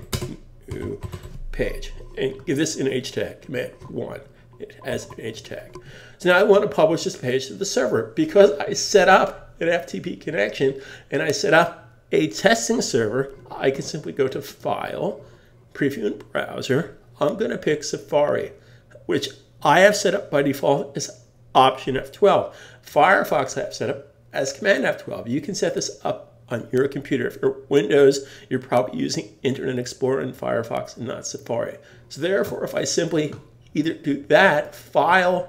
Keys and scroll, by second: 3.8 super+1, 4.9 super+s.